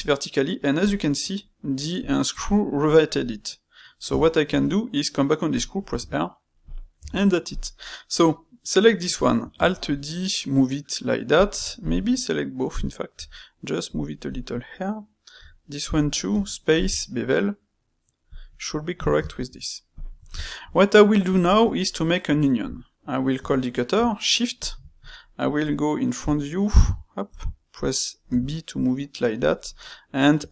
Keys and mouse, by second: 1.7-4.0 middle drag, 4.0 Tab, 4.4 space, 6.9 Tab, 7.4 click, 8.4-9.5 middle drag, 9.5 alt+d, 11.7 shift+click, 12.0-13.1 middle drag, 13.1 g, 14.3 click, 14.5 middle click, 15.3 g, 16.3 space, 18.7-19.9 middle drag, 20.2-23.3 ctrl+shift+middle drag, 23.3 space, 25.2-27.2 middle drag, 27.2 KP_1, 29.6-30.5 middle drag.